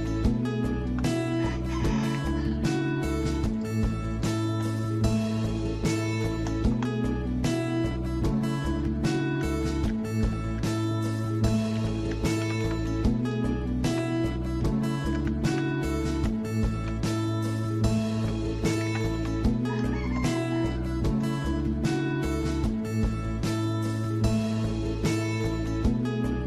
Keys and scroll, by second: 1.7-2.9 typing, 4.0-6.7 typing, 7.8-8.5 typing, 8.7 ctrl+z, 9.9 ctrl+z, 10.3 ctrl+z, 12.4 Escape, 12.6 Escape, 13.8 Escape, 15.2 ctrl+z, 15.5 ctrl+z, 16.8 Escape, 18.2 Escape, 18.3-21.9 typing, 25.1-25.9 typing.